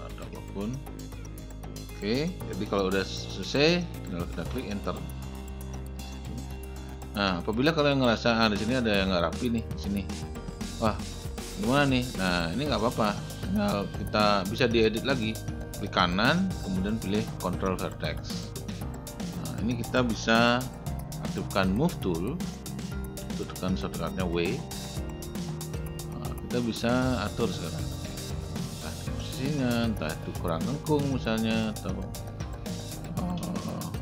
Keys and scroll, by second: 4.6 Return, 23.2 w.